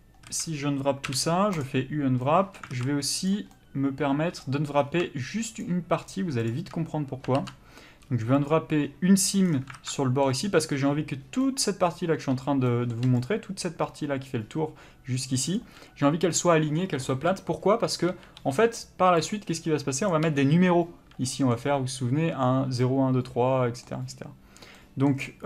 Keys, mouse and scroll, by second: 0.3 a, 1.6 u, 2.2 middle click, 2.8 alt+a, 3.2 click, 3.5 middle click, 4.6-5.6 scroll up 1, 5.6 shift+click, 8.5 ctrl+e, 9.4-9.8 scroll down 1, 9.8 alt+a, 9.9 middle click, 13.2 click, 15.6 d, 17.1 n, 20.1 click, 20.3 n, 21.3 middle click.